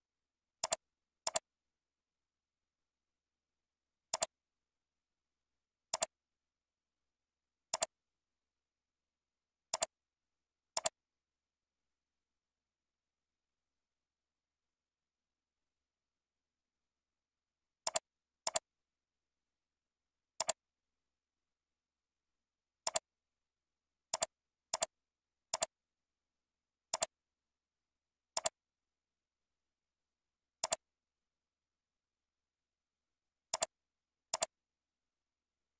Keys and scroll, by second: 19.6 ctrl+z.